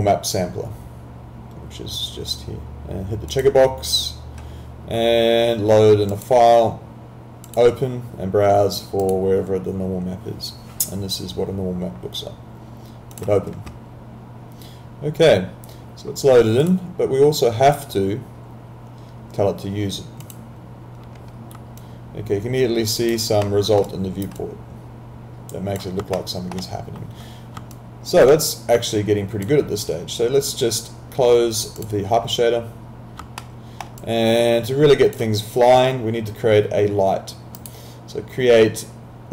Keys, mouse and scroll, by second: 3.3 click, 6.1 click, 13.1 click, 16.7 click, 20.2 click, 21.8 alt+click, 23.5 alt+middle click, 23.9 alt+right click, 24.4 alt+click, 26.2 alt+middle click, 27.7 alt+click, 28.9 alt+click, 31.8 click, 33.4 alt+middle click, 34.0 alt+click, 37.5 click.